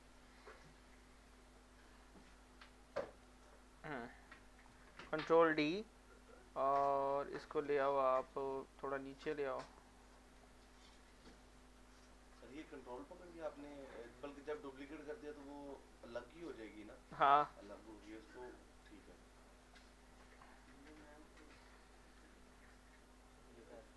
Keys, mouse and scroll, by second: 0.1-2.2 drag, 2.2-4.6 shift+drag, 5.4 ctrl+click, 5.6 ctrl+d, 8.8 click, 9.1-10.7 drag, 10.7 alt+middle click, 11.6-13.5 drag, 13.5 click, 14.6 shift+scroll down 1, 15.5 alt+shift+middle click, 18.8-20.7 shift+drag, 20.7 alt+shift+middle click, 21.2 shift+scroll up 1, 22.0 alt+shift+middle click, 22.7-23.9 shift+drag.